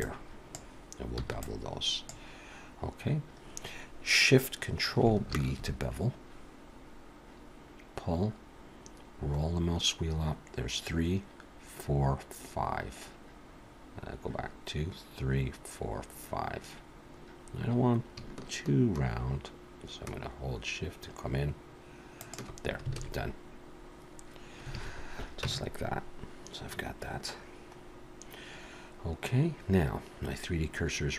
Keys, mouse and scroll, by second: 1.2 b, 5.3 ctrl+shift+b, 23.0 alt+a, 24.7 alt+a, 25.4 Tab, 27.8-28.4 scroll up 1, 30.1-30.7 scroll up 1.